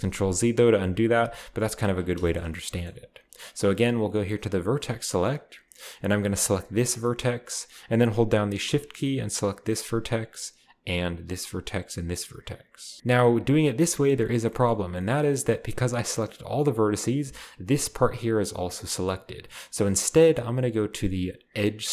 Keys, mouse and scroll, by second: 0.7 ctrl+z, 1.7 ctrl+z, 2.0 shift+middle click, 4.6 click, 6.7-7.0 middle drag, 7.0 right click, 7.1-8.1 middle drag, 7.1-8.1 scroll up 1, 9.7-13.0 shift+right drag, 13.0-13.5 middle drag, 13.0-13.5 scroll up 1, 14.2-16.0 shift+middle drag, 14.8-15.1 scroll up 2, 21.5 click.